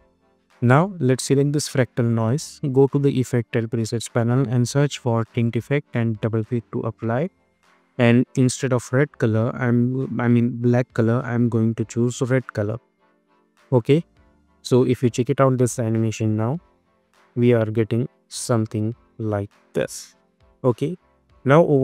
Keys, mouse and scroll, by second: 2.6 click, 3.0 ctrl+a, 3.6-4.9 typing, 6.2-11.9 drag, 12.0 click, 14.1 space, 19.7 space, 20.2-21.8 drag.